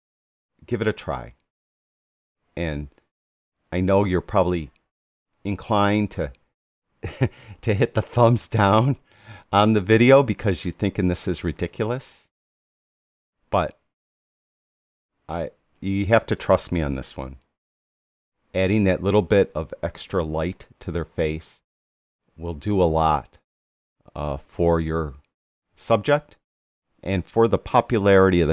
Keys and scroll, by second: 17.3 \, 20.0 Right.